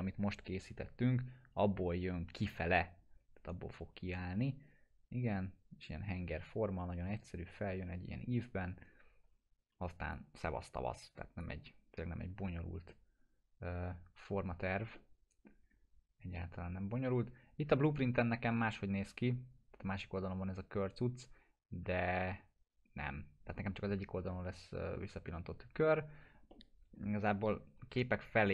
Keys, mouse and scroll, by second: 10.1-11.7 drag, 12.1 scroll down 1, 14.9-15.6 middle click, 15.6 scroll down 1, 19.2-19.5 scroll up 1, 26.5-27.1 middle drag.